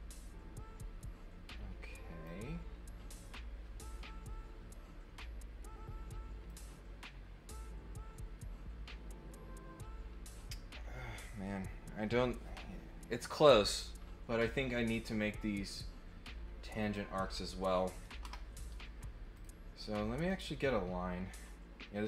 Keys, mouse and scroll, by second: 6.4 click, 16.7 click, 19.3 click, 20.2 click.